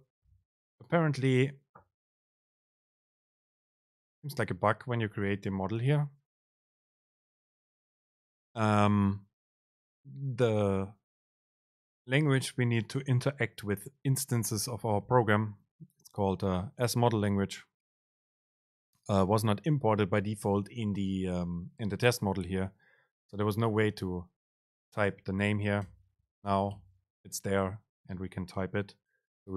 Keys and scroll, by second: 3.2 alt+Return, 25.2 super+space, 26.6 Up, 26.8 BackSpace.